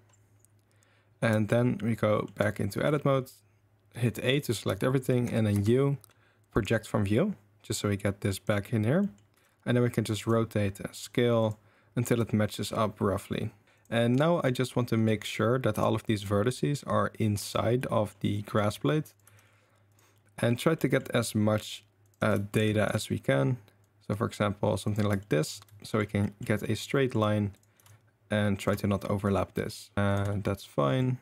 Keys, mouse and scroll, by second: 1.5 shift+middle click, 2.9 Tab, 4.1 a, 4.8 shift+middle click, 5.5 u, 8.3 click, 9.1 click, 9.3 r, 10.2 s, 12.0 r, 13.7 right click, 14.1 right click, 14.5-15.1 middle drag, 15.7 g, 17.8 drag, 18.3 drag, 19.2 g, 20.2 click, 20.9 click, 22.2 g, 23.1 click, 23.9 g, 25.2 shift+right drag, 25.9 shift+right click, 26.3 shift+right click, 27.0 shift+right click, 27.7 g, 29.1 drag, 29.7 click, 29.9 shift+g, 30.3 click, 30.7 drag.